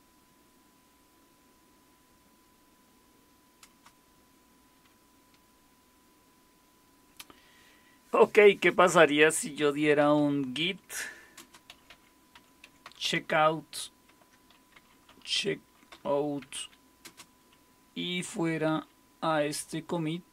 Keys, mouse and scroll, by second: 3.7 space, 4.8 typing, 9.7-17.1 typing.